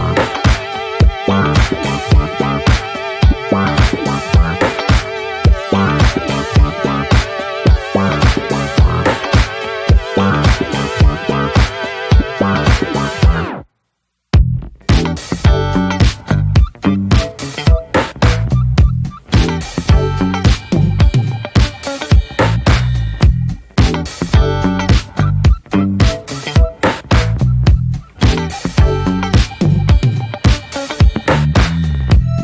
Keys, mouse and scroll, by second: 0.5 ctrl+v, 3.8 click, 4.2-5.1 alt+middle drag, 5.1 e, 5.8-6.1 middle drag, 6.1 ctrl+z, 8.0 alt+middle click, 8.8 shift+middle click, 9.1 e, 11.9 click, 13.1 e, 14.2 middle click, 14.5 s, 15.6 alt+middle click, 16.3 click, 16.7 s, 18.3 click, 18.9 s, 20.8 click, 21.5 2, 21.6 click, 22.4 click, 22.8 alt+shift+click, 23.2 s, 24.1 click, 25.0 Tab, 25.1 drag, 25.2-25.5 scroll down 9, 25.5-25.9 shift+middle drag, 25.9 scroll up 1, 26.0 ctrl+s, 26.2 click, 26.4 ctrl+a, 27.1 click, 27.3-27.7 right drag, 27.7 click, 28.1 shift+middle drag, 28.2 scroll up 1, 28.3 click, 28.5 scroll down 2, 28.7-29.2 middle drag, 29.2 scroll down 1, 29.3-29.8 shift+middle drag, 29.8-30.4 scroll up 1, 30.4 shift+middle click, 30.6 scroll up 2, 30.8 Tab, 31.1 middle click, 31.3-31.8 scroll up 1, 31.8 ctrl+r.